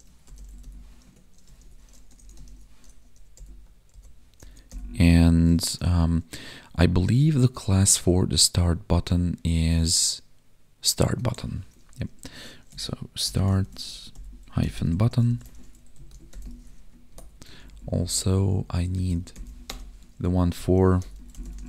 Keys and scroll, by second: 1.0 Tab, 7.5 ctrl+Tab, 11.2 ctrl+Tab, 15.5 ctrl+s, 15.9 Right, 16.4 ctrl+s, 17.0 alt+shift+Down, 17.5 ctrl+Left, 18.9 Left.